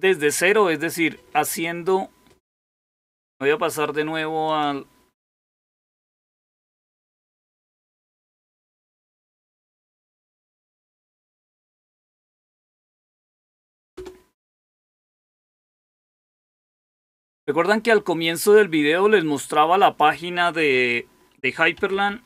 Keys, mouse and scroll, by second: 4.4 click, 6.6 super+8, 9.0 alt+super+r, 12.3-13.2 typing, 13.9 Return, 19.7 click, 21.4-22.2 typing.